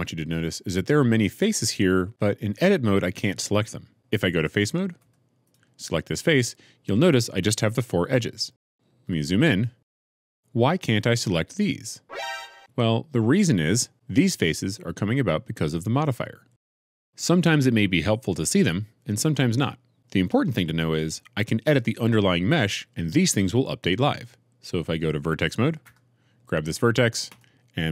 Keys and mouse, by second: 3.9 1, 4.9 3, 5.3 click, 9.2 middle click, 10.0 shift+middle click, 12.6-13.6 middle drag, 25.8 1.